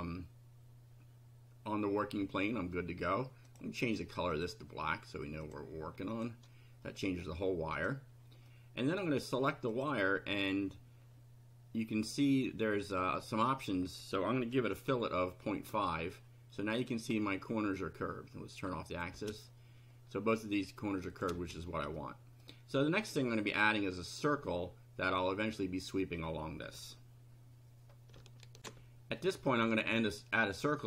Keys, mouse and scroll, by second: 3.5 click, 4.3 click, 5.4 click, 6.1 click, 6.8-7.4 middle drag, 7.8 click, 8.4-9.0 middle drag, 9.7 click, 12.1-13.1 drag, 13.5 click, 14.6 KP_Decimal, 14.9 KP_5, 17.1 scroll up 2, 18.9 click, 19.2 space, 21.1 click, 21.3 space, 21.9-22.6 middle drag, 28.6 ctrl+r.